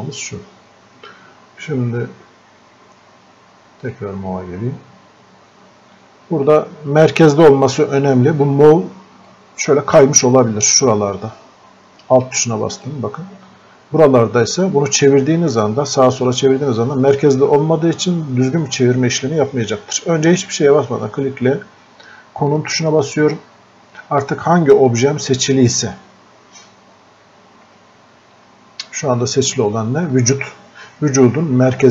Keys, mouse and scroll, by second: 8.4 click, 9.3-22.5 alt+drag.